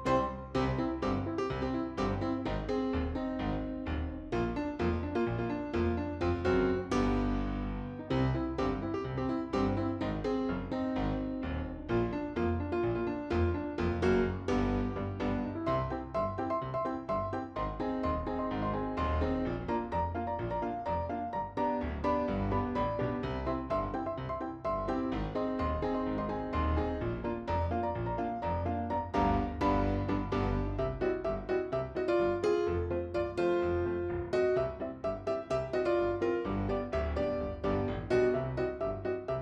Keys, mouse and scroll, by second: 3.2-4.3 drag, 5.2-7.8 middle drag, 7.8 click, 9.2-10.9 drag, 11.5 shift+click, 11.8 shift+click, 11.9 middle click, 12.4 shift+click, 12.7 shift+click, 13.0-18.4 middle drag, 18.4 click, 19.2-21.5 middle drag, 21.5-22.0 drag, 22.5-25.6 middle drag, 25.6-31.3 drag, 31.3 middle click, 31.7 click, 32.7 shift+click, 32.9 middle click, 33.3 shift+click, 33.6 shift+click, 33.8 shift+click, 33.9 shift+click, 34.1-35.1 middle drag, 35.7 shift+click, 35.9 shift+click, 36.2 shift+click, 36.3 shift+click, 36.6 middle click, 37.2 shift+click, 37.3 shift+click, 37.5 shift+click, 37.7 shift+click, 38.0 middle click, 38.6 shift+click, 38.9-39.4 middle drag.